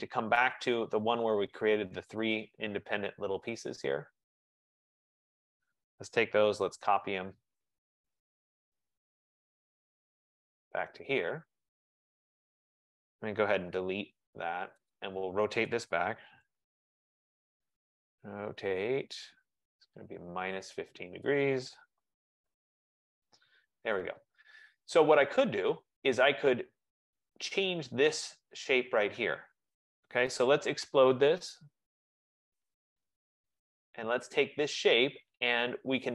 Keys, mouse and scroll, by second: 0.8 click, 2.4 shift+click, 3.7 shift+click, 3.8 shift+click, 4.8 shift+click, 5.3 click, 6.7 typing, 7.0 Return, 8.9 click, 10.6 click, 10.8 typing, 11.8 Escape, 12.7 click, 13.0-14.1 typing, 15.0 click, 15.9-17.5 typing, 20.5 click, 21.4 click, 22.5 5, 22.9 Return, 24.0 click, 26.4 click, 30.3-32.2 typing, 33.0 click, 33.8 click, 34.6 typing, 35.8-36.1 typing.